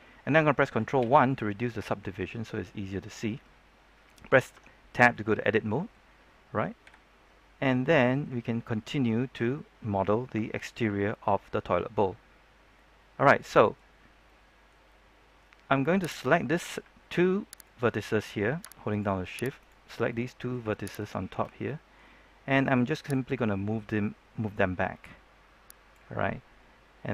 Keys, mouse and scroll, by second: 0.9 ctrl+1, 1.3-3.4 middle drag, 3.4 scroll up 1, 3.5-4.5 scroll down 1, 4.5 Tab, 5.1-6.6 middle drag, 6.8 KP_3, 7.7-8.1 scroll up 1, 12.4-12.7 scroll down 1, 12.7 middle click, 13.9-14.2 scroll down 1, 14.2 middle click, 16.1 right click, 18.8 shift+right click, 19.5 right click, 20.0 middle click, 20.9 shift+right click, 21.6-22.9 middle drag, 23.1-25.9 drag.